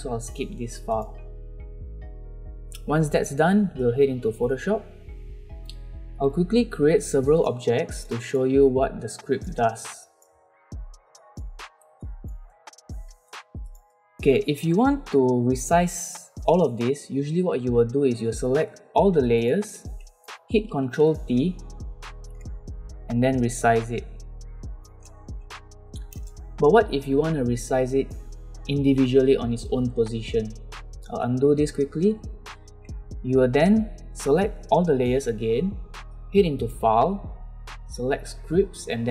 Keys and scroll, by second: 13.2 v, 20.9 ctrl+t, 31.2 ctrl+z.